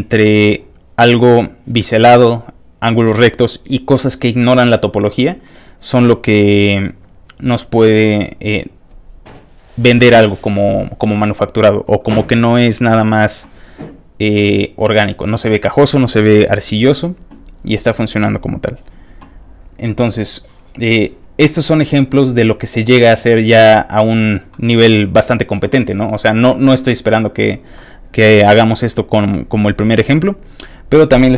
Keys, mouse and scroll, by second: 6.4 scroll down 2, 7.1 scroll down 1, 8.0 scroll down 2, 14.0-14.4 scroll up 2, 14.4-16.3 scroll down 2, 16.3 click, 17.7 middle click, 17.7 scroll down 1, 18.5 click, 18.6 scroll up 1, 22.7 click, 23.4 click, 24.5 middle click, 26.5 middle click, 27.7 middle click, 29.2 middle click, 30.6 click.